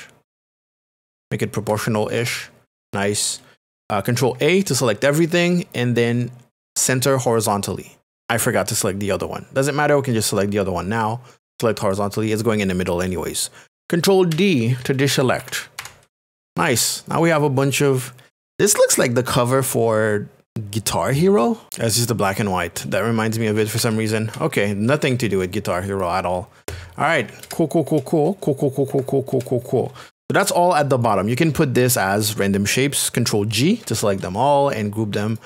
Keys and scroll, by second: 2.2 Return, 4.3 ctrl+a, 14.3 ctrl+d, 17.1 KP_Subtract, 21.6 Return, 23.8 alt+Tab, 27.4 ctrl+KP_Add, 28.9 ctrl+KP_Subtract, 29.3 ctrl+KP_Add, 31.0 KP_Add, 33.8 ctrl+g, 35.1 g.